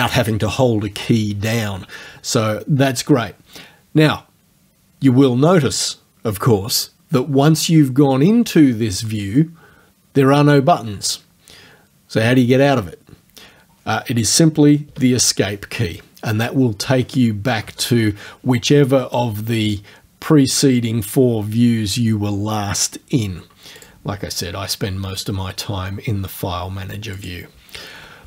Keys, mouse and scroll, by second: 14.9 Escape, 23.8 click, 27.2 click.